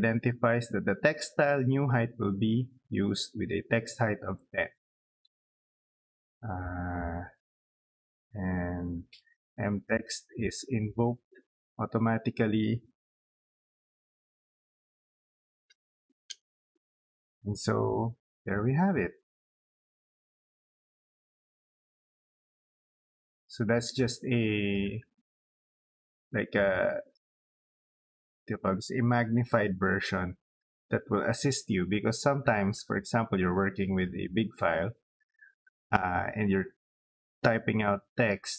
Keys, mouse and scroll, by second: 3.8 click, 6.2 middle click, 6.7 scroll down 2, 8.7 click, 10.2 middle click, 11.1 scroll up 4, 12.0-13.3 scroll down 2, 13.1-16.6 typing, 17.6 scroll down 2, 17.8 middle click, 18.4 scroll down 2, 18.9 middle click, 19.9 middle click, 20.7 click, 21.8 scroll up 2, 22.5 scroll up 2, 23.0 scroll down 2, 23.3 middle click, 23.8 scroll down 2, 24.4 middle click, 31.6 scroll down 2, 32.0 middle click, 32.5 scroll down 2, 33.6 middle click.